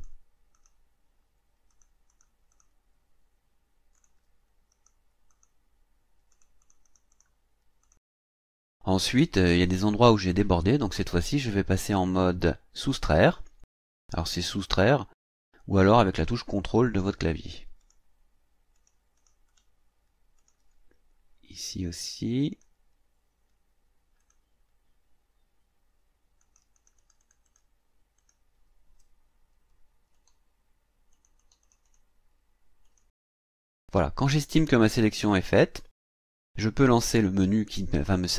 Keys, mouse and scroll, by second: 0.5 click, 1.7 click, 2.1 click, 2.5 click, 4.0 click, 4.7 click, 5.3 click, 6.3 click, 7.8 click, 8.7 scroll down 2, 9.1-11.5 scroll up 2, 13.0 click, 17.8 click, 18.7 click, 19.2 click, 20.4 click, 21.2 scroll up 1, 22.5 click, 24.2 click, 26.4-27.7 drag, 28.2 click, 30.1 click, 31.1 click, 32.8 click, 34.0 scroll down 1, 34.7-35.0 ctrl+scroll down 1.